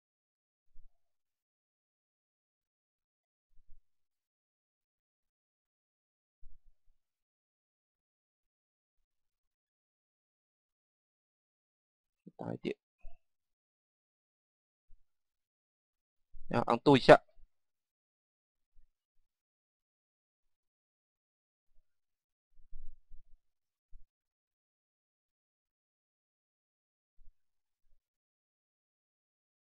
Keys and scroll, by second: 0.2 Page_Down, 3.7 Page_Down, 6.5 Page_Down, 11.0 Page_Down, 29.1 Page_Down.